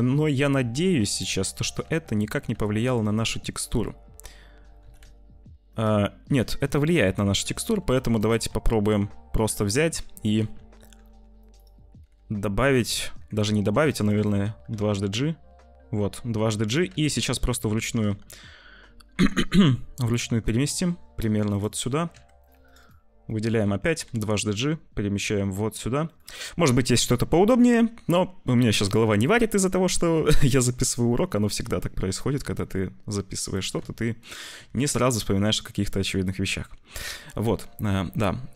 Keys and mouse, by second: 1.7 z, 4.7 s, 6.6 ctrl+z, 7.2 z, 7.8 2, 8.2 click, 10.3 z, 10.9 ctrl+r, 11.9 g, 12.9 ctrl+z, 13.4 2, 13.7 click, 14.1 alt+shift+click, 14.5 g, 16.8 z, 17.3 shift+middle click, 17.8 g, 22.0 2, 22.4 click, 23.3 shift+click, 23.9 g, 28.5 2, 28.7 click, 29.6 shift+click, 31.5 1, 32.3 z, 33.4 click, 34.7 z, 36.1 shift+click.